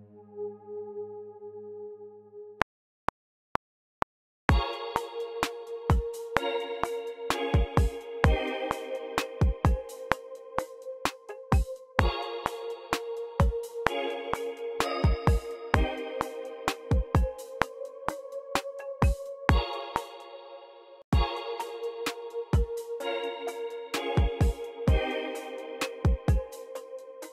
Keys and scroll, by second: 2.0 ctrl+alt+super+n, 2.6 r, 19.8-22.0 typing.